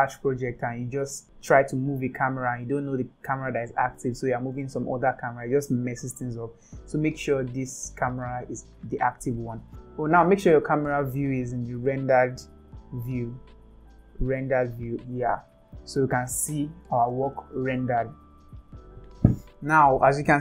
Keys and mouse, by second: 9.7 click, 13.9-19.7 drag.